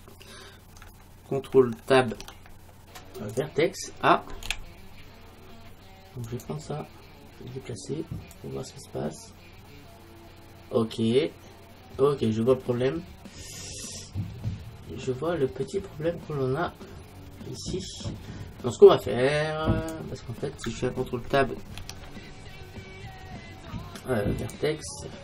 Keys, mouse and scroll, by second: 2.1 ctrl+Tab, 4.5 a, 6.3-8.2 right drag, 8.4-18.5 drag, 21.8 ctrl+Tab.